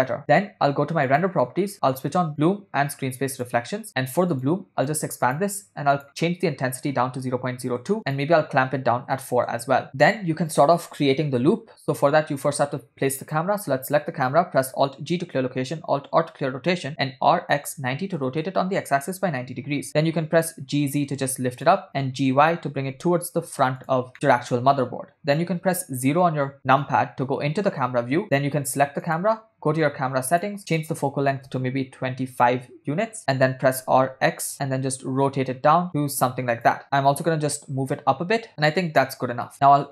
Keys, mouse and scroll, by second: 1.2 click, 2.5 drag, 3.4 click, 4.6 click, 4.9 click, 5.3 click, 6.0-7.9 drag, 7.0 0, 8.9 click, 13.2-13.6 drag, 15.1 alt+g, 16.3 alt+r, 17.2 r, 19.7 g, 21.9 g, 24.1 click, 25.7 KP_0, 29.3 click, 30.3 click, 30.8-32.6 drag, 33.8 r, 37.0 g, 38.6 r.